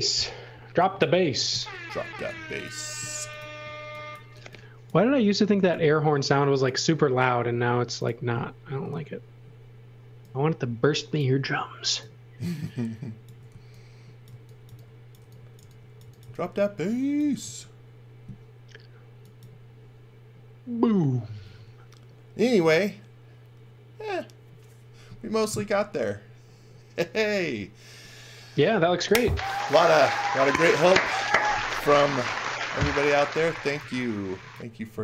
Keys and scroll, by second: 1.3 space, 1.5 c, 2.4 space, 3.2 m, 4.3 e, 5.7 c, 8.7 space, 13.5-17.4 typing, 33.2-34.9 typing.